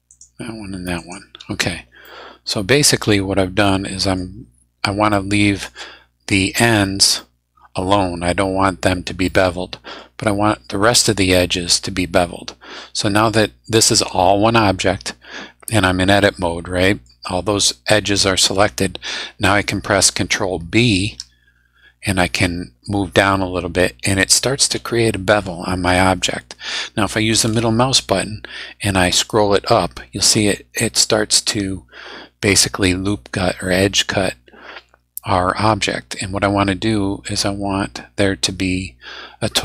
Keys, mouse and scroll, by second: 0.1 shift+right click, 0.9 shift+right click, 1.5 shift+scroll down 2, 2.0-4.3 middle drag, 5.1 middle click, 7.1 middle click, 9.2 middle click, 10.8-11.1 scroll up 2, 12.4 scroll down 2, 15.6 scroll up 2, 16.2-17.2 drag, 18.1 middle click, 18.3 scroll down 2, 18.4 scroll up 2, 18.4-18.7 scroll down 2, 19.0 middle click, 19.0 scroll up 2, 19.1 middle click, 20.8 ctrl+b, 29.1 scroll up 2, 31.6 scroll down 2, 33.6 scroll up 1, 36.0 scroll up 1.